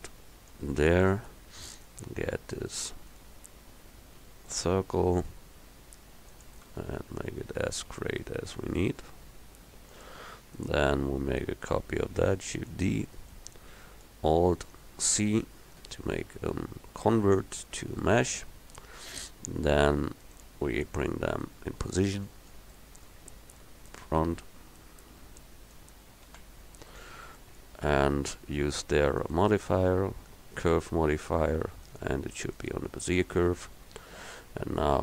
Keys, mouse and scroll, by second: 1.4 click, 1.5 middle click, 3.2 right click, 4.3 g, 6.7 s, 11.4-12.7 drag, 12.7 shift+d, 15.9 alt+c, 22.6 middle click, 26.3 KP_1.